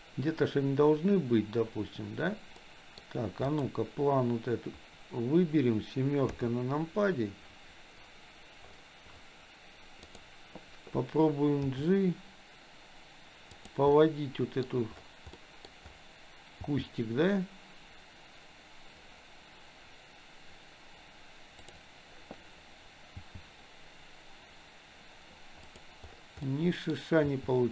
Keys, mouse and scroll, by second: 0.0 click, 2.6-3.0 middle drag, 3.4 click, 6.3 KP_7, 10.1 click, 11.6 g, 13.9 scroll up 1, 14.1 middle click, 14.6 scroll down 1, 15.4 middle click, 16.6 g, 23.2 g, 26.4 scroll up 1, 26.7 middle click, 26.9 scroll down 1, 27.3 g.